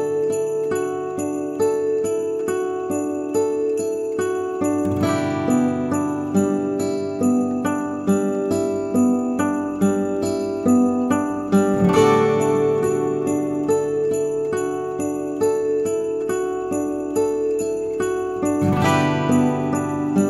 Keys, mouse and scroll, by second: 0.9 scroll down 1, 1.1 g, 2.4 Delete, 3.3 click, 3.6 alt+click, 4.2 g, 5.3-5.7 scroll down 2, 6.1-6.6 scroll up 1, 6.6 click, 6.6 scroll up 1, 7.3 Delete, 8.0 ctrl+z, 8.6 click, 9.0 g, 9.6 click, 9.7 g, 10.3 click, 10.4 g, 11.2 click, 11.4 g, 12.2 click, 12.4 g, 13.0 click, 13.1 g, 13.6 scroll down 1, 13.9 Tab, 14.1-14.6 scroll down 2, 14.6 middle click, 14.8-15.4 scroll up 10, 15.3 middle click, 15.7-16.9 scroll down 5, 16.4 click, 16.9 middle click, 18.7-19.2 scroll up 2, 19.2-20.2 scroll down 1.